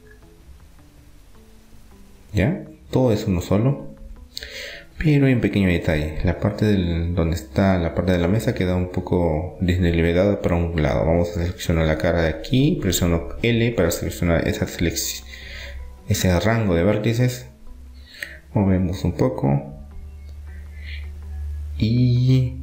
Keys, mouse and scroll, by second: 0.0 Tab, 2.5-4.2 middle drag, 3.2 a, 5.9-7.3 middle drag, 9.9-11.7 right drag, 11.2-13.0 drag, 12.0-13.5 right drag, 13.3 l, 14.2 KP_1, 15.2-16.9 middle drag, 16.2 KP_3, 17.2-18.5 middle drag, 18.5-20.4 drag.